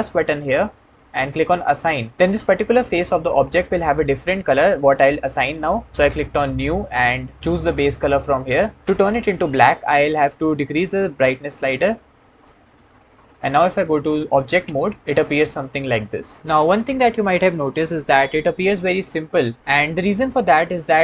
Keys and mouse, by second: 1.3 click, 5.2 click, 14.5 Tab.